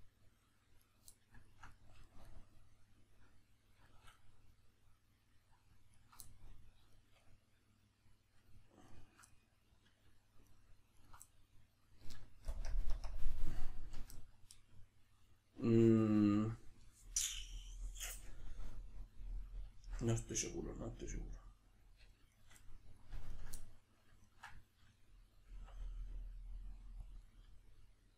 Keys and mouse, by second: 0.8-8.9 middle drag, 0.8 right click, 5.9 ctrl+right click, 8.9 ctrl+right click, 9.3-10.5 middle drag, 10.5 ctrl+right click, 11.0 ctrl+right click, 11.3-18.6 middle drag, 12.5 ctrl+KP_Add, 12.9 ctrl+KP_Subtract, 19.7-22.3 shift+middle drag, 22.3 shift+right click, 22.6 middle click, 23.3 ctrl+right click, 23.6-27.1 middle drag, 25.5 e, 27.1 click, 27.3-28.1 middle drag.